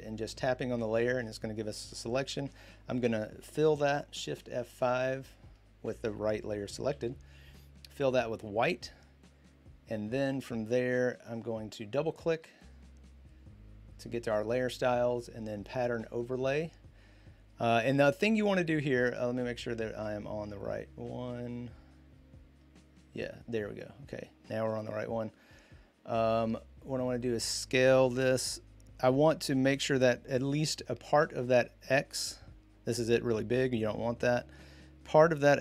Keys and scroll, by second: 4.0 shift+F5, 6.7 shift+F5.